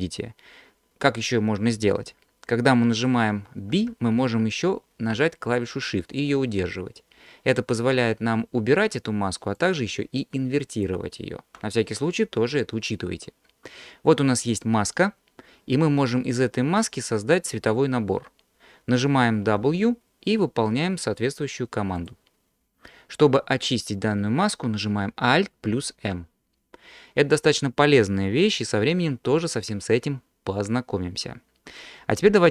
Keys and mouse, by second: 3.7 b, 19.6 w, 25.7 alt+m.